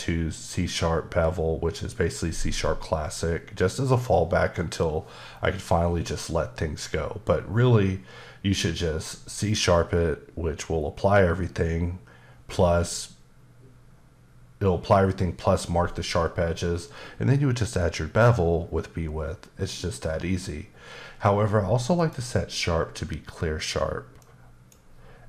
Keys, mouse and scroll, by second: 1.8 click, 22.0 click, 24.2 click.